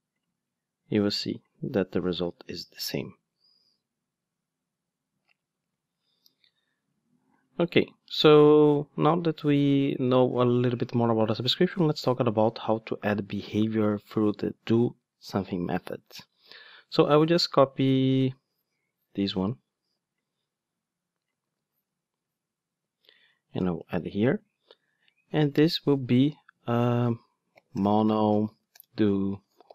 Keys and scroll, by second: 2.1 ctrl+shift+d, 21.5 super+c, 24.0 super+v.